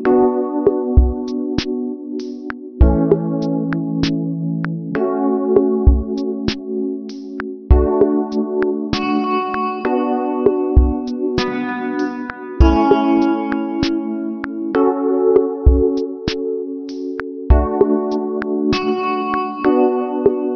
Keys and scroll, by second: 2.8 ctrl+h, 4.4 ctrl+d.